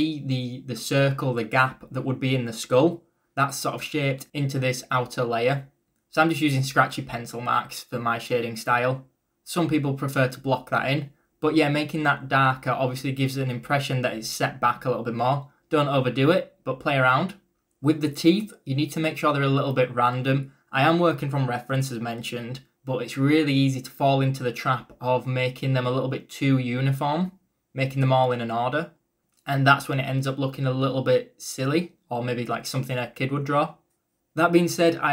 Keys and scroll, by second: 0.0-0.4 typing, 7.9 ctrl+z, 8.3 e, 8.9 b, 13.1-15.8 typing, 19.0-21.4 typing, 24.0-26.9 typing, 24.9 ctrl+z.